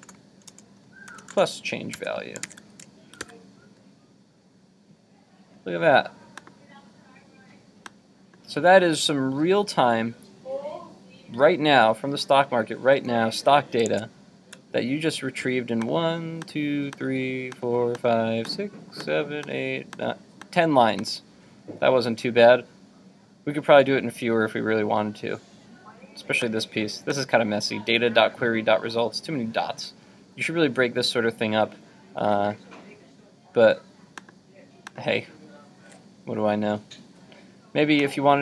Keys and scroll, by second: 2.0 super+s, 2.6 super+Tab, 3.2 super+r, 13.9 super+Tab.